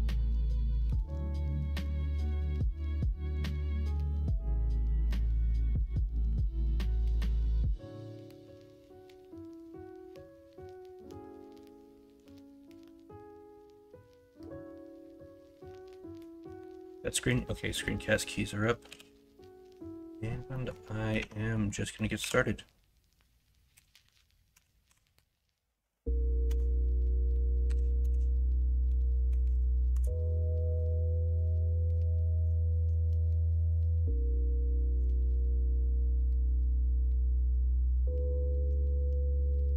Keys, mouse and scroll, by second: 8.7 middle click, 9.4 middle click, 10.5 x, 12.0 shift+middle click, 12.3 shift+a, 14.2 middle click, 14.9 middle click, 16.5 middle click, 18.8 n, 20.5 middle click, 21.2 Tab, 21.5 middle click, 22.2 s, 31.6 middle click, 32.3 middle click, 32.5 shift+middle click, 34.6 middle click, 35.1 scroll up 1, 35.2 shift+middle click, 35.3-36.2 scroll down 2, 35.5 middle click, 36.2 middle click, 36.4-36.7 scroll down 1, 36.7-37.3 scroll up 1, 38.6 F2.